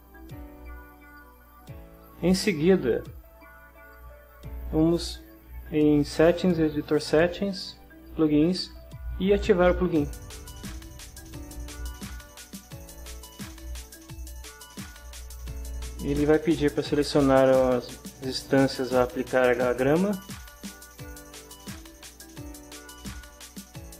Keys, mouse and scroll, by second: 3.9 click, 6.8 click, 8.0 click, 12.0 click, 16.3 click, 21.0 click.